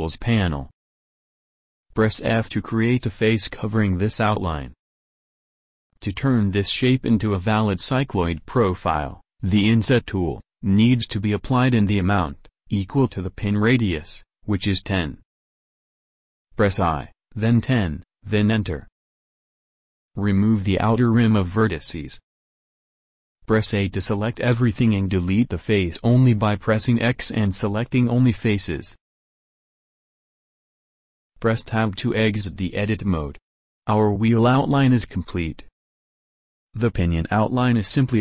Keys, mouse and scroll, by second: 2.4 f, 16.0 i, 20.0 a, 21.3 x, 23.5 a, 24.5 x, 31.9 Tab.